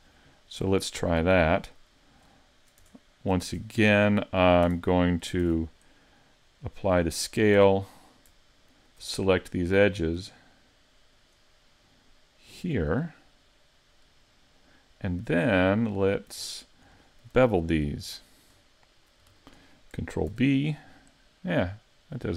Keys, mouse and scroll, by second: 2.8 Tab, 3.4 ctrl+Tab, 4.2 middle click, 4.7 Tab, 5.4 ctrl+a, 7.6 Tab, 8.7 alt+right click, 10.1 alt+shift+right click, 11.1 alt+right click, 12.5 alt+shift+right click, 13.0 middle click, 16.1 shift+middle click, 16.5 middle click, 17.1 shift+middle click, 17.5 middle click, 18.2 shift+middle click, 18.6 middle click, 19.4 shift+middle click, 20.3 ctrl+b.